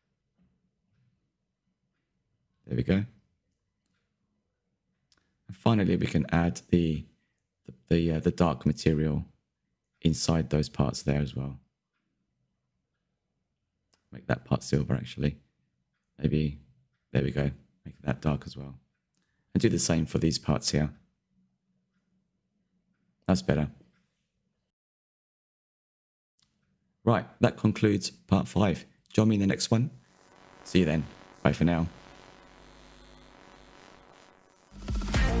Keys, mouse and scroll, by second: 1.3 middle click, 1.6 click, 1.8 middle click, 2.7 alt+click, 3.0 ctrl+b, 4.2 middle click, 4.7 click, 5.0 Tab, 5.2 click, 5.4 middle click, 6.1 Tab, 6.6 3, 6.8 alt+click, 7.0 middle click, 7.4 scroll up 3, 7.5 shift+middle click, 8.2 click, 8.3 middle click, 8.8 click, 9.4 middle click, 10.0 alt+shift+click, 10.6 alt+shift+click, 10.6 middle click, 11.2 scroll up 1, 11.5 alt+shift+click, 11.6 scroll down 5, 11.8 middle click, 12.4 click, 12.8 Tab, 13.8 click, 14.0 scroll down 2, 14.2-14.5 middle drag, 14.5-14.9 scroll up 5, 14.9 middle drag, 15.2 Tab, 15.3 middle click, 15.5 scroll up 2, 15.6 2, 16.0 alt+click, 16.2 middle click, 16.9 click, 17.2-17.9 scroll down 8, 17.4 Tab, 17.5 click, 17.9-18.9 shift+middle drag, 18.9 /, 19.2 click, 19.4 KP_Decimal, 19.5 middle drag, 19.7 scroll up 5, 19.9 shift+middle click, 20.4 scroll up 2, 20.8 Tab, 21.0 3, 21.3 alt+click, 21.5 shift+middle click, 22.6 click, 22.9 Tab, 23.1 Tab, 23.5 click, 23.9-25.5 scroll down 10, 25.5-25.9 scroll down 1, 25.9-35.4 shift+middle drag.